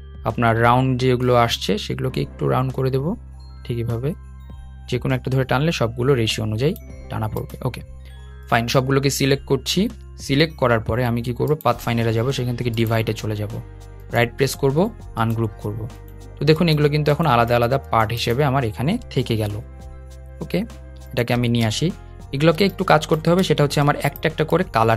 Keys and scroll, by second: 18.7 super+z, 19.1 super+z, 19.9 super+z, 20.3 super+z.